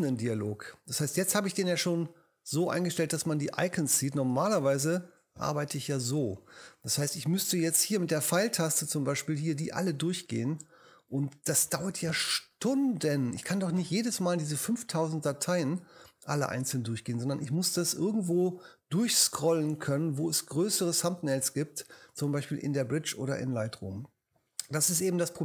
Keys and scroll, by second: 4.6 super+3, 8.0 Up, 11.2 Up.